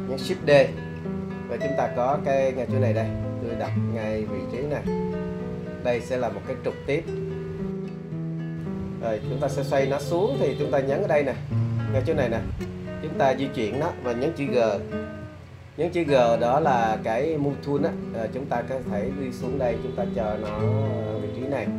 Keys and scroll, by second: 0.5 shift+d, 8.1 super+z, 15.2 g.